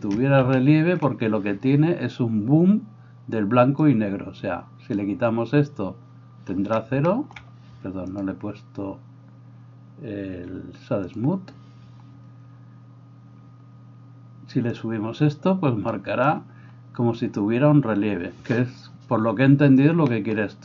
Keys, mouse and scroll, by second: 3.9-20.6 drag.